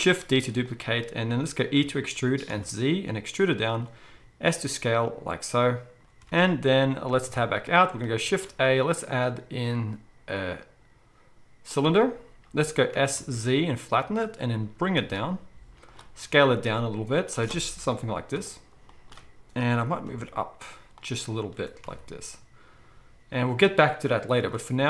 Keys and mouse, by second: 0.2 shift+d, 0.7-10.3 middle drag, 1.8 e, 4.1 s, 6.3 alt+a, 7.3 Tab, 8.3 shift+a, 12.9 s, 14.6 g, 16.1 s, 17.8 KP_1, 21.5 g.